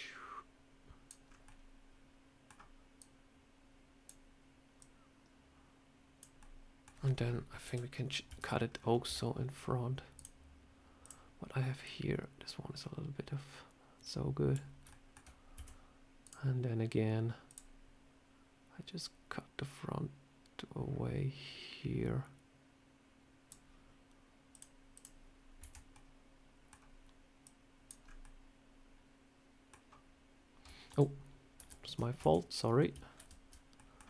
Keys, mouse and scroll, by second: 1.1 scroll up 3, 1.3 middle click, 2.8 click, 4.6 click, 6.3 middle click, 7.5 KP_7, 8.2 Tab, 8.5 scroll down 3, 8.9 a, 10.0 click, 14.8 shift+middle click, 15.4 a, 16.1 click, 24.4 click, 24.8 click, 25.5 Tab, 25.8 middle click, 27.3 click, 27.9 scroll up 3, 28.1 middle click, 30.8 ctrl+z, 31.5 ctrl+z, 32.1 Tab, 33.0 ctrl+z, 33.6 middle click.